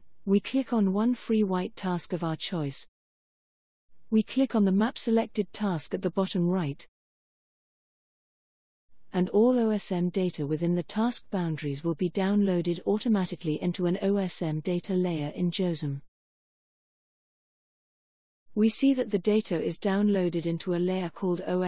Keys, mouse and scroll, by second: 2.3-4.1 drag, 6.5 click.